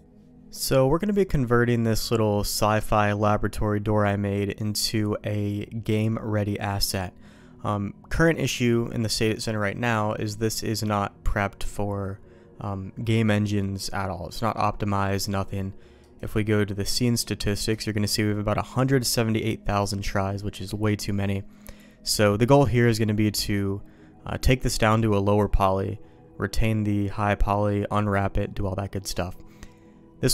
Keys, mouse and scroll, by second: 16.0-17.0 right drag.